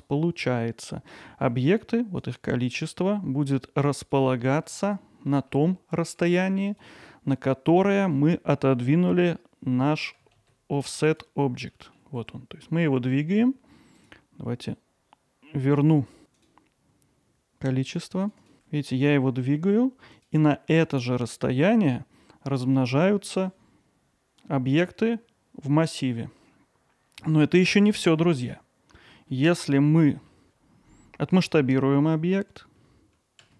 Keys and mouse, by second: 2.3-4.2 drag, 4.5 alt+middle click, 5.0-5.3 ctrl+alt+middle drag, 5.5 middle click, 6.0 alt+middle click, 8.0 middle click, 11.1 click, 11.7 alt+middle click, 16.4 click, 17.9 click, 18.0 click, 18.2 click, 18.4 click, 18.7 g, 29.0-29.3 middle drag, 30.0 middle click.